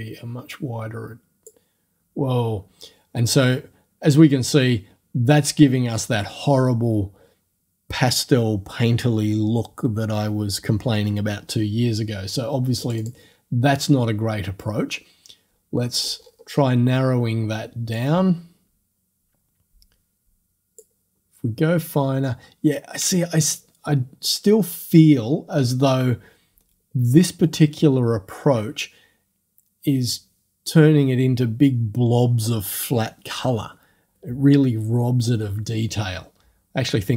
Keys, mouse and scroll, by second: 12.8 click, 16.2-16.8 scroll up 2, 18.0-21.0 drag.